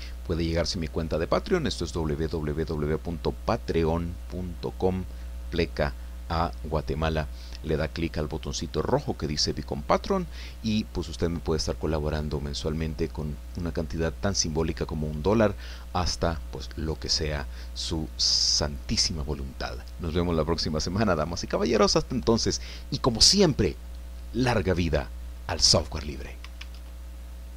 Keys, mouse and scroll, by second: 26.8 alt+Tab.